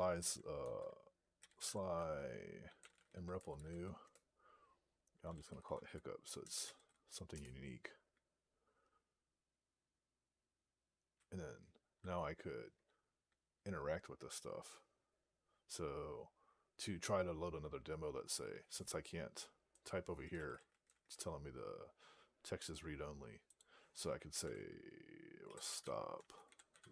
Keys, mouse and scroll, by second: 0.5 alt+x, 1.0-7.1 typing, 19.6 click, 19.9-21.2 typing, 23.4 click, 24.8 (.